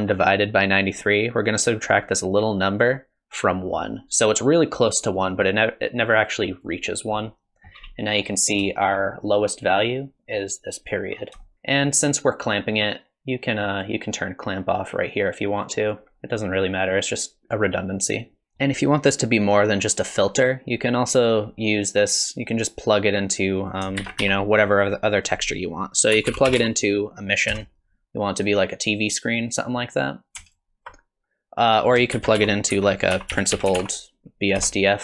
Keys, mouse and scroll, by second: 23.6 click, 24.0 shift+a, 30.5 ctrl+shift+click, 32.1 shift+a.